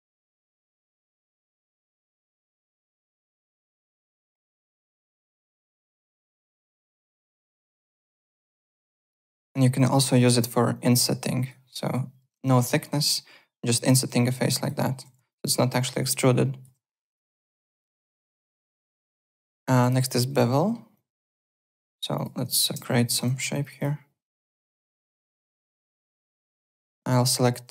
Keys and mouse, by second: 0.1 click, 0.6 click, 1.7 click, 3.0 click, 4.0 click, 5.8 alt+middle click, 6.1 alt+click, 7.0 w, 7.3 alt+click, 7.7 alt+Tab, 8.1 alt+Tab, 8.5 click, 9.4 click, 10.7 click, 11.8 click, 12.2 KP_0, 12.3 Return, 13.0 click, 13.9 w, 14.2 alt+click, 14.8 alt+middle click, 15.0 z, 15.3 alt+click, 15.5 alt+right click, 15.8 alt+click, 17.0 click, 17.5 ctrl+z, 17.8 alt+Tab, 19.7 alt+Tab, 20.0 alt+click, 20.3 alt+right click, 20.5 alt+middle click, 20.9 alt+click, 21.4 alt+right click, 21.7 alt+middle click, 22.1 click, 23.1-23.9 typing, 23.5 click, 26.0 alt+middle click, 26.2-27.1 typing, 26.2 alt+click, 26.8 click, 27.3 alt+click.